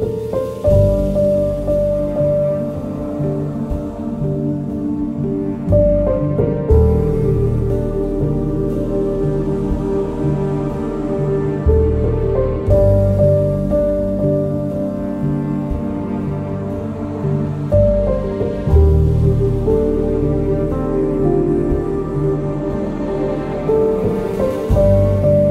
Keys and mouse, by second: 0.7 g, 1.5 click, 3.6 click, 4.2 click, 5.0 g, 6.4 click, 9.4 g, 10.4 click, 11.5 2, 12.3 alt+click, 16.7 shift+click, 19.3 ctrl+click, 23.4 middle click, 24.0 alt+z.